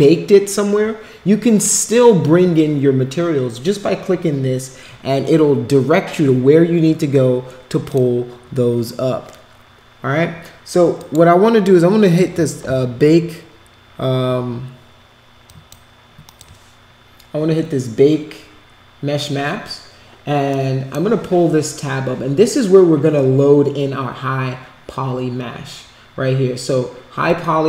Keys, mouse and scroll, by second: 7.8 click, 10.9 click, 15.4 click, 16.2 click, 20.5-20.9 drag.